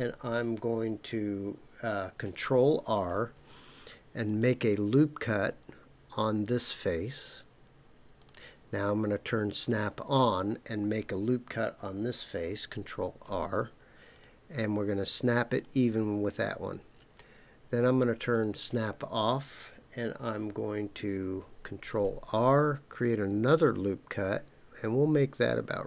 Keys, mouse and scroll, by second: 2.2 ctrl+r, 8.2 click, 9.6 click, 12.4 ctrl+r, 15.6 click, 18.3 click, 21.2 ctrl+r.